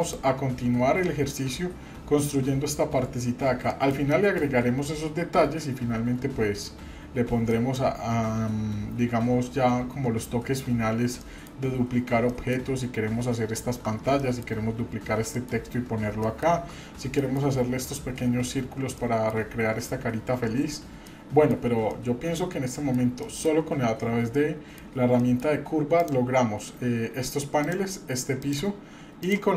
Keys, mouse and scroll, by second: 0.5-0.9 scroll up 2, 1.1 shift+middle click, 3.7 middle click, 4.1 middle click, 5.3-6.0 scroll down 2, 6.3-6.9 scroll down 2, 6.9 scroll up 1, 7.5 middle click, 8.6-9.9 scroll down 1, 11.2 middle click, 11.8 scroll up 1, 12.3 shift+middle click, 12.7-13.6 scroll up 2, 13.6 scroll down 1, 13.7 shift+scroll down 1, 14.2 shift+middle click, 14.5-15.2 shift+scroll down 2, 15.4 shift+middle click, 16.2-16.7 shift+middle drag, 16.7-17.0 scroll up 1, 17.2 shift+middle click, 18.9-19.3 shift+middle drag, 19.7 scroll down 1, 20.2-20.7 scroll down 1, 21.1-21.5 middle drag, 21.9-22.9 middle drag, 23.2 shift+middle click, 23.7 scroll up 1, 24.3 middle click, 25.2 shift+middle click, 25.9 click, 27.6 click, 28.4 click, 29.2 drag.